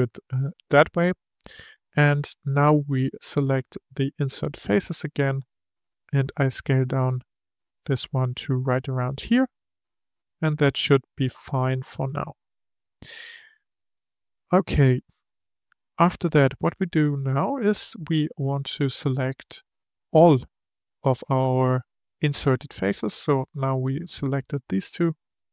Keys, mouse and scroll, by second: 0.7-1.3 scroll up 3, 1.3-4.1 middle drag, 4.1-6.0 drag, 9.7-12.8 middle drag, 18.7-20.1 drag, 20.1-23.2 middle drag, 24.8-25.5 middle drag.